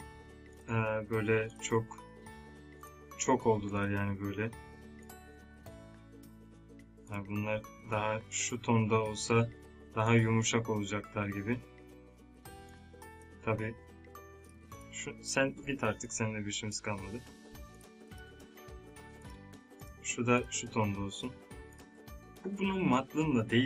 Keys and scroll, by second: 13.4 ctrl+Num_Lock, 13.5 z, 15.5 Delete.